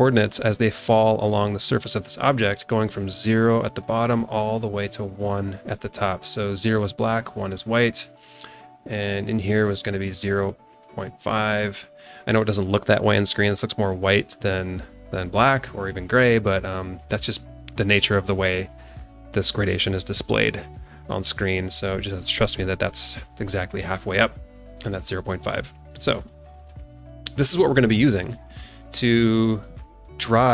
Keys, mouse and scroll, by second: 2.9 click, 3.7 click, 5.0 click, 9.3 click, 10.0 click, 10.7 click, 11.0 click, 11.5 click, 25.9 ctrl+d, 26.6 alt+middle click, 26.9 alt+middle click, 27.6 scroll down 1, 27.9 alt+middle click, 28.8 alt+middle click, 29.4 scroll down 2, 29.7 shift+middle click, 30.3-30.5 scroll up 2.